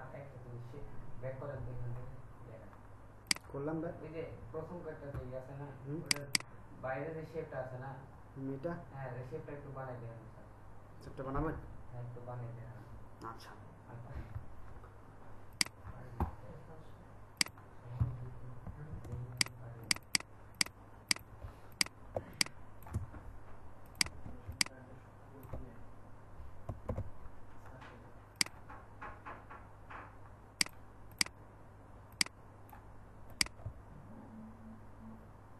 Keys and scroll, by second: 19.1 ctrl+alt+space, 26.8 shift+x.